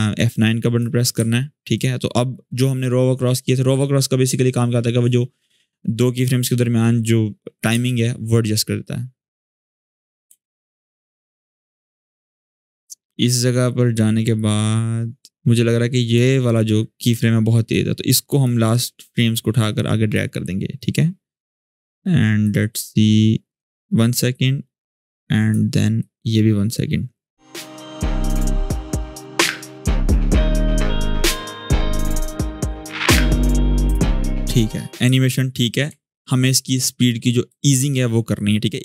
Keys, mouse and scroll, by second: 0.9 F9, 1.5 click, 5.9-7.4 drag, 7.5 space, 9.5-10.2 click, 10.0 space, 12.0-16.0 drag, 28.0 space, 31.3-31.9 click, 31.7 space, 32.2 shift+scroll down 1, 32.8-34.2 shift+scroll down 1, 34.2-34.8 click, 34.9-36.3 shift+scroll down 4, 36.3-37.8 drag, 38.7-38.8 drag.